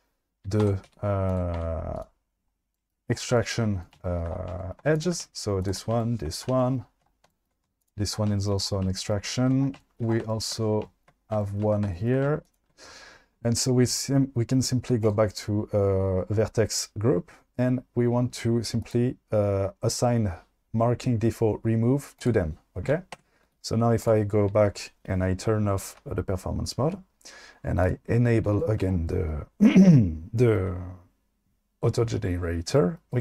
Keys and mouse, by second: 0.8 Tab, 0.8 q, 1.6 Tab, 2.0 click, 5.0 shift+click, 12.5 shift+click, 18.9 click, 22.2 click, 23.2 Tab, 23.4 q.